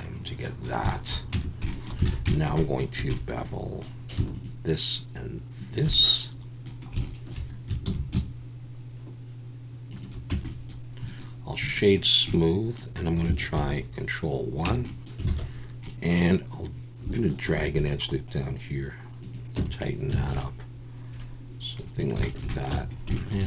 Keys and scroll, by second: 1.3 Tab, 2.1 alt+a, 3.0 2, 7.9 ctrl+b, 10.3 Tab, 13.6 ctrl+1, 14.7 Tab, 15.4 alt+a, 17.4 ctrl+r, 19.6 Tab, 20.2 alt+a, 22.7 Tab.